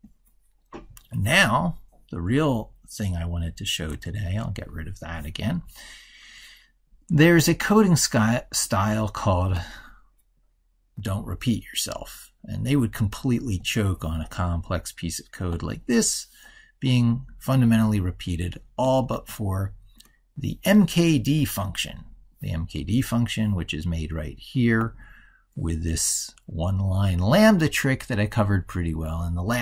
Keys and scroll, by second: 3.8 ctrl+b.